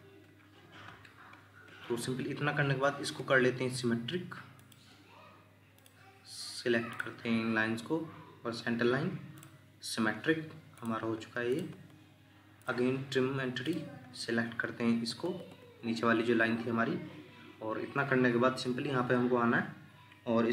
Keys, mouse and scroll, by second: 3.2 Escape, 3.5 Escape, 5.8 shift+click, 6.9 shift+click, 11.7 Escape, 15.2 Escape.